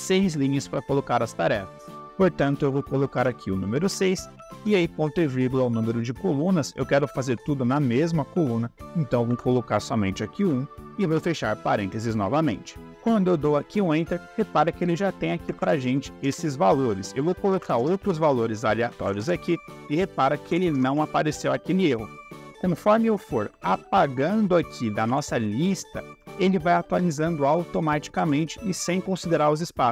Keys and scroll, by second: 3.1 6, 4.4 /, 9.2 1, 10.8 shift+0, 15.1-16.0 typing, 16.1 Return, 17.4 d, 17.7 Return, 18.8 s, 19.1 Return, 20.3 f, 20.6 Return, 20.8 Caps_Lock, 23.4 Delete, 25.0 Delete, 28.1 Delete.